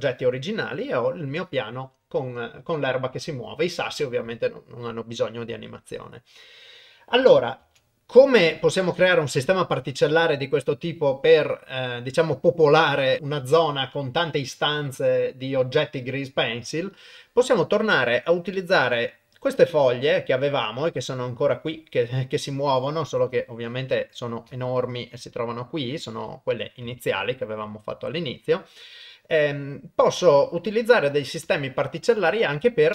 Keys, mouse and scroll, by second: 18.6-21.6 drag, 23.2 KP_0, 24.0 middle click, 24.8 ctrl+middle click, 25.3 middle click, 26.9 KP_0, 31.9 click.